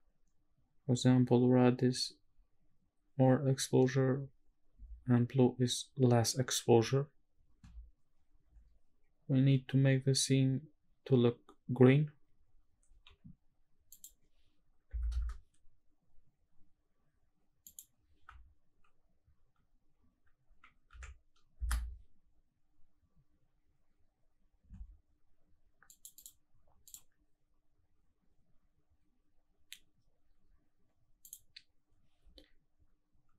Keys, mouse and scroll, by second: 13.9-15.1 drag, 17.6-21.6 drag, 25.9 click, 26.1-27.1 drag, 31.2-33.3 drag.